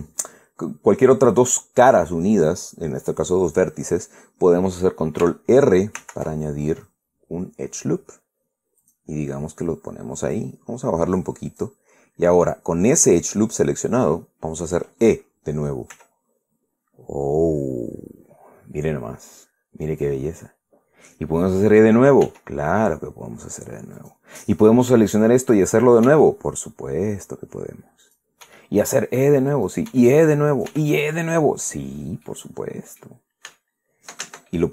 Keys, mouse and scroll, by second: 6.7 ctrl+r, 9.5 click, 11.0-12.5 drag, 16.6 e, 20.6 click, 22.9 e, 24.7 click, 25.7 right click, 26.8 e, 28.7 click, 29.1 e, 30.2 click, 30.6 e, 31.2 click, 31.4 e, 31.9 click, 32.9 middle click, 34.2 Caps_Lock, 34.2 middle click, 34.3 scroll down 1.